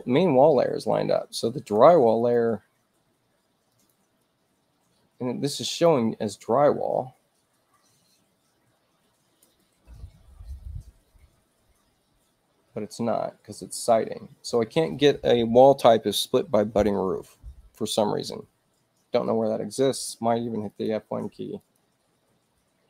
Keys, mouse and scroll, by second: 2.1 click, 3.6 click, 5.7 click, 20.6 click, 21.5 click.